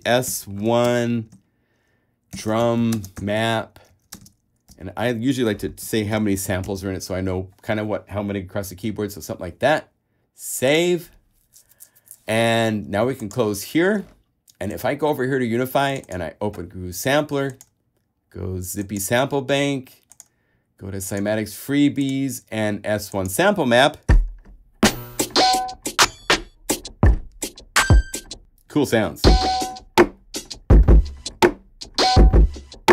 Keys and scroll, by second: 0.1 shift+s, 0.5 shift+i, 1.1 space, 2.3-4.9 typing, 6.0 5, 6.3 0.